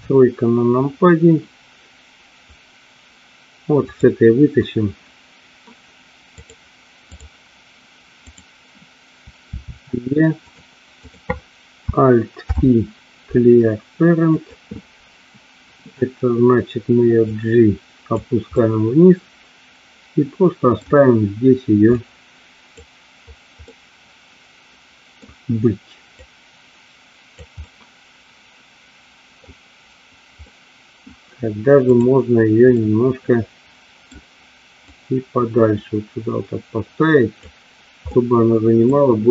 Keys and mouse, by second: 3.9 click, 6.4-7.4 drag, 8.3 click, 9.6 e, 11.1 click, 12.5 alt+p, 17.3 click, 18.6-20.8 middle drag, 22.1 click, 23.7-25.2 middle drag, 26.2-27.5 drag, 27.7-29.5 middle drag, 30.5 middle click, 32.0 click, 32.8-34.1 middle drag, 35.1-37.6 drag, 38.2 middle click.